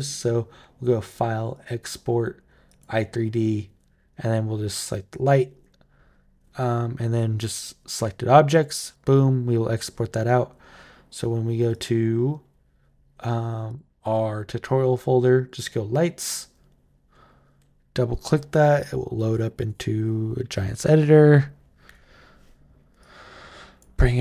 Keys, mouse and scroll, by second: 1.3 click, 2.4 click, 4.9 click, 8.6 click, 11.5 click, 13.5 click, 15.2 click, 15.3 click, 22.8 click.